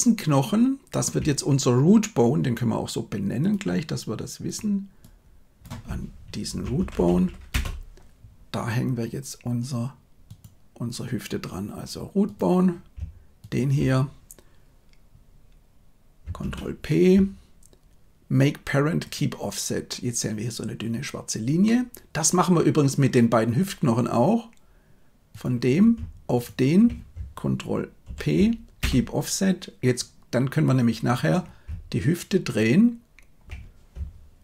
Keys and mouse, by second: 4.4-7.5 drag, 6.9 o, 16.3 ctrl+p, 21.6-22.6 middle drag, 28.1 ctrl+p, 32.4 shift+right click.